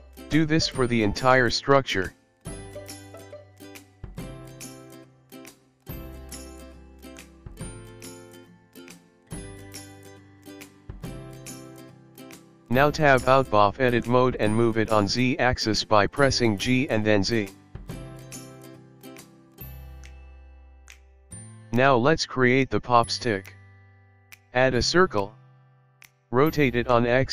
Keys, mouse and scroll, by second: 1.7 ctrl+r, 3.7 ctrl+r, 5.8 middle click, 6.3 ctrl+r, 7.6 middle click, 8.3 ctrl+r, 9.9 middle click, 10.9 Tab, 11.3 KP_1, 11.7-12.5 scroll down 5, 12.1 click, 12.3 click, 12.3 middle click, 12.3 KP_1, 12.6 shift+middle click, 13.6 click, 15.0 g, 19.4-20.2 scroll up 4, 20.4 shift+middle click, 21.8 shift+a, 26.8 r.